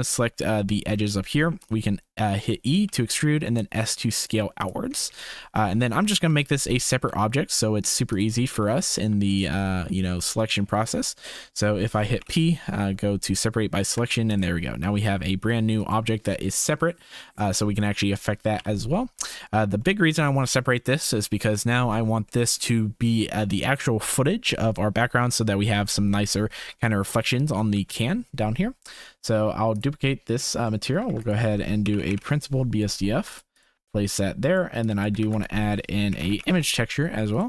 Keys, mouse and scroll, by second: 1.5 e, 5.4 shift+click, 5.7 3, 6.3 shift+click, 8.1 alt+shift+click, 10.3 shift+click, 12.1 p, 13.9 Tab, 14.3 click, 14.8 g, 16.8 click, 18.5 KP_0, 19.3-19.7 shift+middle drag, 22.4 shift+middle click, 26.9 shift+middle click, 28.1 ctrl+s, 30.6 middle click, 31.0 shift+a, 34.0 click, 35.0 click, 35.2 shift+a.